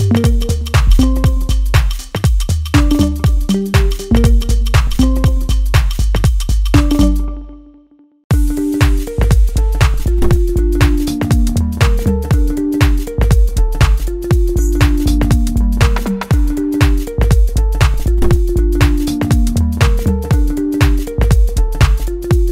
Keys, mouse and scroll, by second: 2.7 click, 2.9 click, 3.6-5.4 right drag, 5.4 click, 7.6 click, 8.5 middle click, 9.5 right click, 10.6 click, 11.6-14.6 middle drag, 14.6 click, 15.0-16.4 middle drag, 16.4 click, 20.3 scroll up 1, 20.8-22.2 shift+middle drag, 22.2-22.5 scroll up 1.